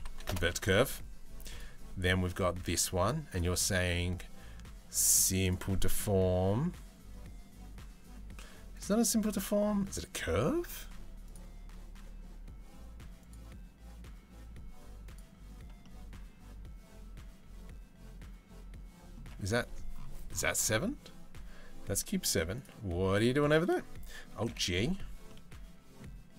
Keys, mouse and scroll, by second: 1.1 click, 3.0-5.2 drag, 8.6-9.6 drag, 10.9-13.0 drag, 14.7 click, 15.4-16.4 middle drag, 18.7 click, 24.1 alt+g, 24.9-25.6 middle drag, 26.0 click.